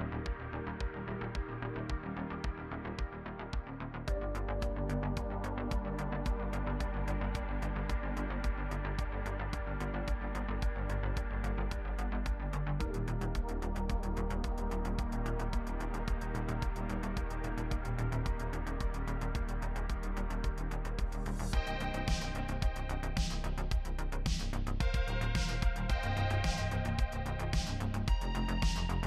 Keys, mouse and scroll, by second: 0.1 ctrl+r, 0.3 middle click, 0.3 Tab, 0.5 middle click, 0.6 Tab, 0.6 middle click, 0.6 2, 1.1 x, 1.9 shift+click, 1.9 f, 2.0 scroll down 3, 2.0 middle click, 2.1 scroll up 4, 2.1 ctrl+z, 3.3 a, 3.5 x, 3.5 shift+middle click, 3.7 2, 3.8 scroll down 4, 4.1 click, 4.6 Tab, 4.6 middle click, 4.7 scroll down 1, 4.7 alt+a, 4.8 middle click, 4.8-6.0 typing, 5.0 shift+middle click, 5.1 click, 5.1 middle click, 5.2 Tab, 5.2 scroll up 3, 5.3 middle click, 5.4 shift+middle click, 5.4 middle click, 5.6 ctrl+r, 5.7 middle click, 5.8 shift+middle click, 6.4 Tab, 6.5 middle click, 6.6 scroll up 3, 6.6 middle click, 7.0 click, 7.4 Tab, 7.4 Tab, 7.5 click, 7.6 Tab, 7.6 middle click, 7.7 scroll down 1, 7.7 middle click, 7.9 scroll up 3, 7.9 Tab, 7.9 middle click, 8.1 click, 8.2 Tab, 8.2 middle click, 8.2 Tab, 8.4 click, 8.5 Tab, 8.5 scroll down 2, 8.6 middle click, 8.7 middle click, 8.8 middle click, 8.9 middle click, 9.0 middle click, 9.2-13.1 middle drag, 13.1 scroll down 1, 13.1 middle click, 13.1-13.6 scroll up 7, 13.2 click, 13.3 middle click, 13.4 Tab, 13.5 middle click, 13.5 1, 13.6 ctrl+r, 13.8 middle click, 14.0 ctrl+z, 14.0 middle click, 14.0 scroll down 1, 14.1 ctrl+r, 14.2 Tab, 14.2 middle click, 14.3-15.4 scroll up 5, 14.3 ctrl+z, 14.4 middle click, 14.5 Tab, 14.6 middle click, 14.6 Tab, 15.0 middle click, 15.7-20.5 typing, 15.7 middle click, 15.8-16.3 scroll down 2, 15.8 middle click, 15.8 Tab, 16.3 click, 16.4 shift+middle click, 16.5 ctrl+click, 16.6 shift+middle click, 17.1 shift+middle click, 17.3-17.7 scroll up 5, 17.3 Tab, 17.5 shift+middle click, 17.7 click, 17.9 scroll down 2, 17.9 Tab, 18.0 middle click, 18.3 middle click, 18.7-19.1 scroll down 2, 18.8 Tab, 18.8 middle click, 19.0 shift+middle click, 19.1 middle click, 19.2 ctrl+r, 19.5 Tab, 19.8 shift+middle click, 20.1 scroll down 2, 20.2 middle click, 20.3 Tab, 20.4 middle click, 20.5 ctrl+r, 20.8 middle click, 20.8 Tab, 21.0 ctrl+r, 21.1 Tab, 21.2 middle click, 21.3 ctrl+z, 21.4-22.5 scroll up 3, 21.5 middle click, 21.5 a, 21.6 shift+middle click, 21.7 middle click, 22.0 alt+click, 22.1 shift+middle click, 22.5 middle click, 22.5 ctrl+r, 22.9 middle click, 23.1 scroll up 1, 23.1 click, 24.0 middle click, 24.1-27.2 typing, 24.4 middle click, 24.4 Tab, 24.5 scroll up 1, 25.0 middle click, 25.1 shift+middle click, 25.3 alt+click, 25.5 middle click, 25.6 click, 25.7 middle click, 25.9 middle click, 26.0 Tab, 26.4 shift+middle click, 27.1 middle click, 27.3 middle click, 27.5 click, 27.6 shift+middle click, 27.7-28.6 scroll up 4, 27.7 alt+click, 28.0 middle click, 28.1 shift+click, 28.2 f, 28.2 middle click, 28.6 click.